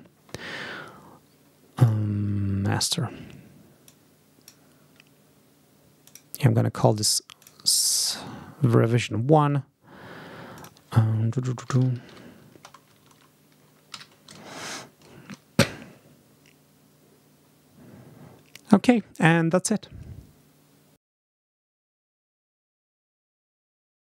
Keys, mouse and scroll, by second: 1.7 click, 3.7 click, 5.9 click, 7.3 click, 10.4 click, 11.3-12.8 typing, 13.8 a, 20.9 click.